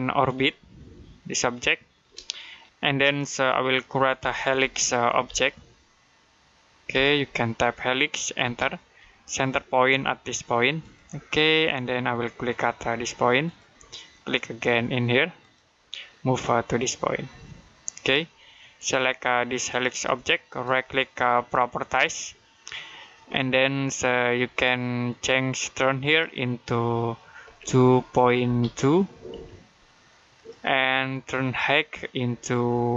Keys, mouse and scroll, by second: 0.3 middle click, 2.1 middle click, 4.1-5.6 typing, 6.8 typing, 8.0-8.8 typing, 10.6 click, 10.6 typing, 13.3 click, 17.6 typing, 17.8 click, 20.3 right click, 21.7 click, 21.7 typing, 24.1 typing, 25.9 click, 27.3 typing, 28.9-29.7 typing, 30.2 click.